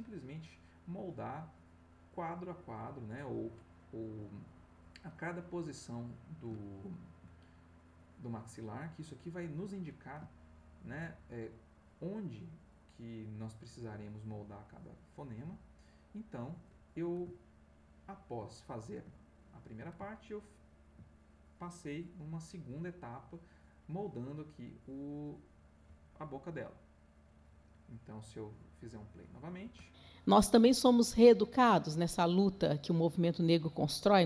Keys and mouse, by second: 5.3-7.3 middle drag, 7.7 click, 10.3 ctrl+middle click, 11.7-17.2 drag, 17.5-18.7 ctrl+middle drag, 20.0 ctrl+middle click, 21.1 ctrl+middle click, 21.9-23.7 drag, 27.1 click, 28.4 click, 29.6 space.